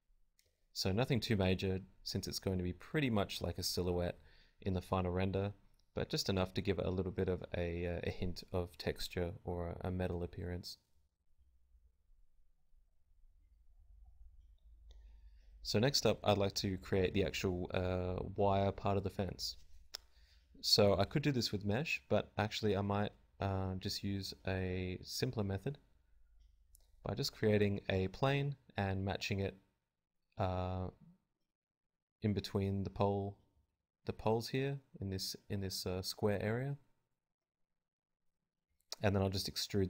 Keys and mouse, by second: 0.0 r, 6.4-9.9 right drag, 11.2 right click, 12.1 KP_Decimal, 13.9 middle click, 15.9-19.9 middle drag, 21.4 Tab, 21.9 z, 25.7 Tab, 26.9 KP_Divide, 27.2 z, 27.7 shift+a, 28.1 KP_1, 28.5 r, 28.9 click, 30.1-34.9 typing, 30.4 click, 34.0 click, 35.3 Tab, 35.7 Tab, 35.9 Tab, 36.2 click, 36.2 g, 36.5 middle click, 36.6-37.9 drag, 37.0 middle click, 37.0 right click, 37.0 z, 37.9 z, 38.9 z, 39.1 e, 39.4 click, 39.6 z.